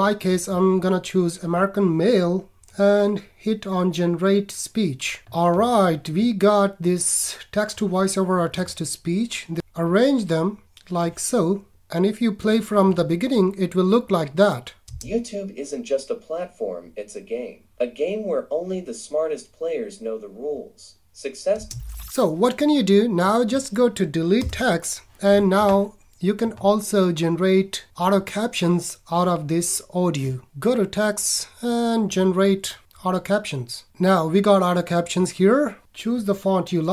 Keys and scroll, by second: 24.4 BackSpace.